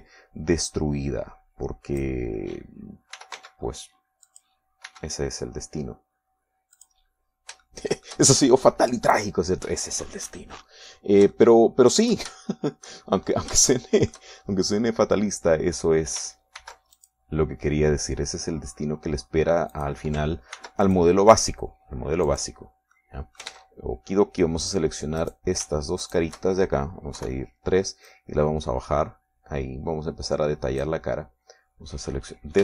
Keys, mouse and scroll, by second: 0.3 x, 1.1 click, 2.0-3.6 drag, 4.5 r, 4.7 x, 5.6 click, 6.2 e, 8.1 click, 9.0 shift+click, 12.7 shift+click, 13.8 shift+middle click, 14.6-15.0 shift+scroll up 1, 15.0-18.3 shift+middle drag, 17.9 ctrl+r, 18.3 ctrl+click, 21.1 click, 21.9 ctrl+r, 22.2 ctrl+click, 23.6 click, 24.3 middle click, 25.0 ctrl+Tab, 26.0 click, 26.6 right click, 27.4 shift+right click, 28.5 KP_3, 29.4-32.4 drag.